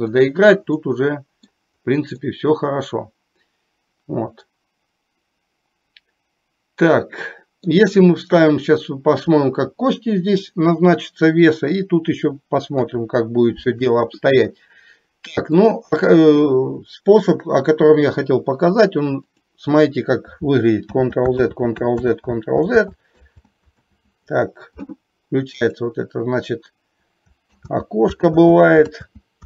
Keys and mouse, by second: 0.2 click, 0.8 middle click, 2.2-7.8 middle drag, 12.8 KP_1, 15.6 click, 21.1 ctrl+z, 21.6 ctrl+z, 22.2 ctrl+z, 22.7 z, 27.7 ctrl+z, 28.5 ctrl+z, 29.1 ctrl+z.